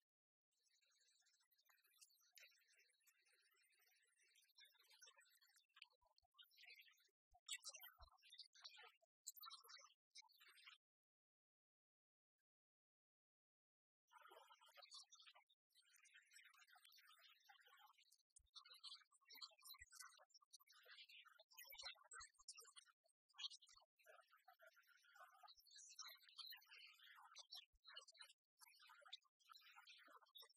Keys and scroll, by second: 27.4 ctrl+alt+shift+e.